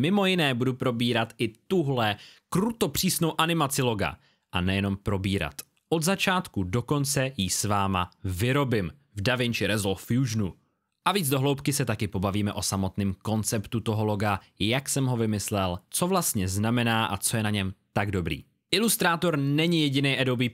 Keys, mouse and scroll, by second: 9.0 click.